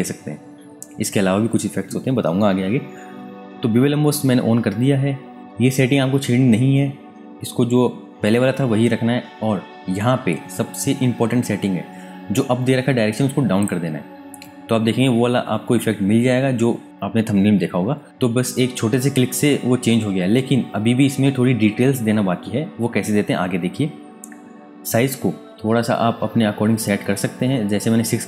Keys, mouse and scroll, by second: 5.4 Tab, 13.6 click, 25.4 click, 25.4 alt+Tab, 25.7-27.6 scroll up 1.